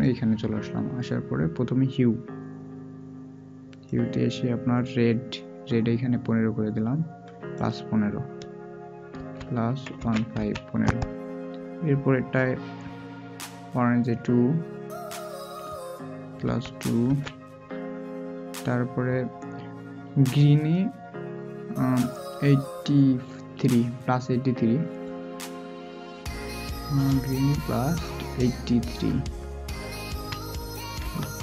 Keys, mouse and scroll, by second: 9.1 typing, 30.0 typing.